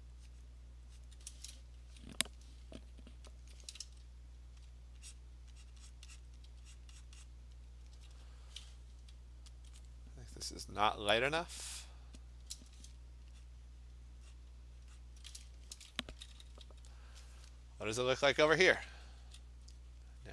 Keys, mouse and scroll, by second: 0.4 click, 1.1 click, 3.4 alt+click, 3.6 alt+click, 4.0-4.7 ], 5.2 click, 5.7 click, 5.9 click, 6.2 click, 6.3 alt+click, 6.4 click, 6.5 ], 6.8 click, 7.1 click, 7.3 click, 8.0 [, 9.7 alt+click, 11.3 click, 12.4 click, 12.6 Return, 13.5 click, 14.0 click, 14.4 click, 14.7 alt+click, 15.0 click, 16.1 [, 16.4 [, 16.5 [, 18.5 [, 18.8 [, 19.2 [, 20.0 click.